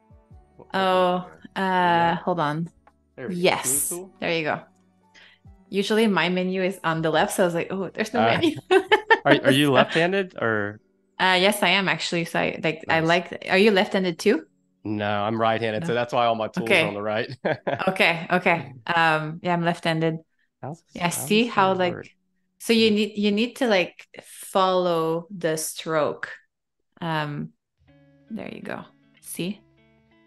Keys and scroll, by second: 18.7 ], 21.8 a.